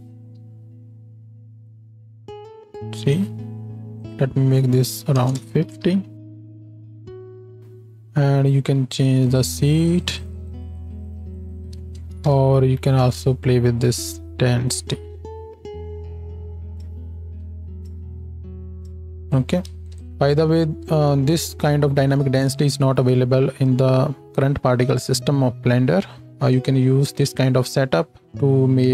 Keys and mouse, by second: 0.0 shift+Left, 0.4 space, 3.1 space, 5.8 shift+Left, 6.2 space, 9.9 click, 11.8 space, 12.6 shift+Left, 13.2 space, 19.9 space.